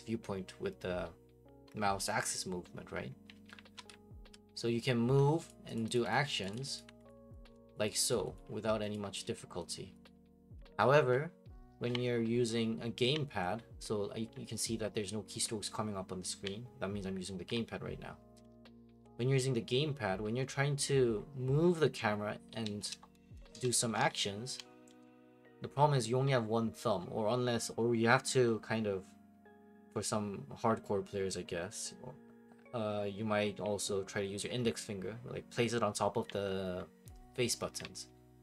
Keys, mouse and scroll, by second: 3.1-38.4 typing, 5.5 click, 7.1 click, 7.4 click, 7.9 click, 8.2 click, 8.4 click, 9.0 click, 9.7 click, 10.1 click.